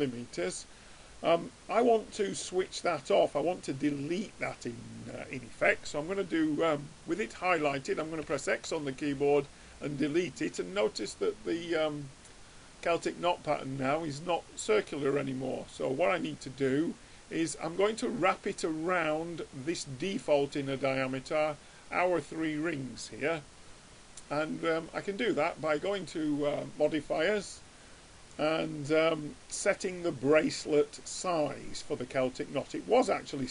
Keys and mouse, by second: 8.3 x, 11.6-13.5 middle drag, 16.4-18.1 drag, 18.5-20.2 drag, 21.2-23.2 middle drag, 26.1-27.9 drag, 29.1-32.9 middle drag.